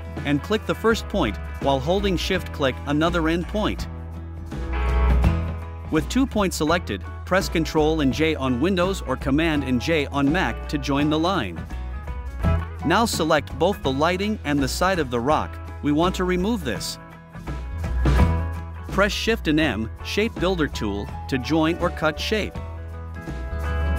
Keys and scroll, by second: 5.4 v.